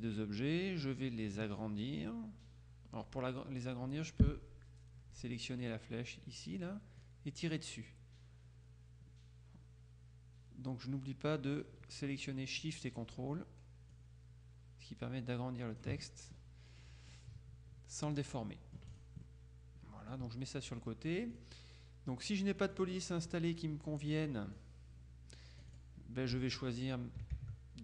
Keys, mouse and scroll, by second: 7.1-12.2 ctrl+shift+drag, 14.0-16.4 drag, 17.2-18.8 drag, 19.0 click, 21.4 click, 22.7 click, 24.2 click, 25.9 click, 26.5 alt+Tab.